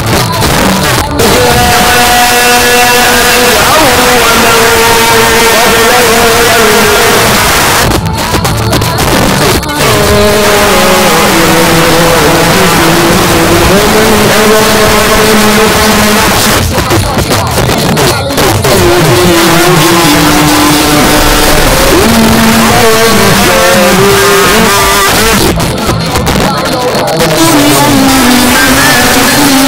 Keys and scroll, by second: 7.3 Page_Down, 15.9 Page_Down, 24.6 Page_Down.